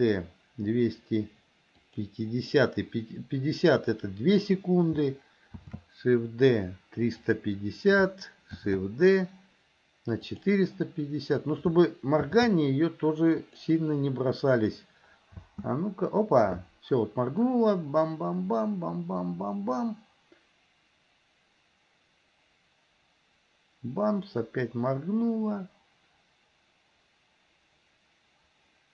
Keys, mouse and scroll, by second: 5.7 shift+d, 12.4 shift+d, 15.5 space.